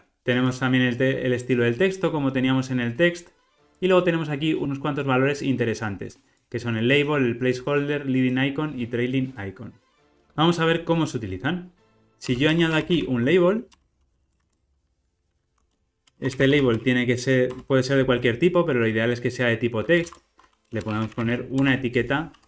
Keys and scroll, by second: 10.2 alt+super+[, 16.8 Return.